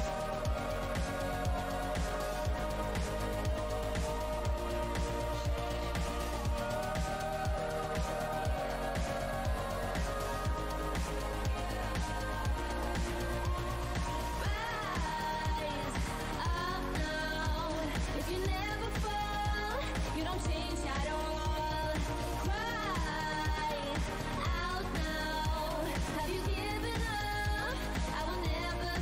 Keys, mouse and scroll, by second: 0.1-0.6 alt+scroll, 2.2 alt+click, 3.4 Delete, 4.0 click, 4.1 Delete, 5.1-5.6 alt+scroll up 1, 6.5 shift+click, 6.7-7.4 alt+scroll up 1, 6.7 shift+e, 8.3 w, 9.2 click, 11.5 right click, 11.7 w, 11.8 scroll down 2, 13.5 alt+click, 15.0 alt+click, 15.4 alt+scroll up 1, 17.6 alt+click, 17.8 alt+scroll up 1, 17.8 r, 18.2 r, 18.9 alt+click, 21.2-21.5 shift+scroll down 2, 22.1 alt+click, 22.7-23.2 scroll down 2, 23.4 w, 24.3 click, 24.5 alt+click, 26.0 click, 27.8-28.6 alt+scroll up 1, 28.6 click.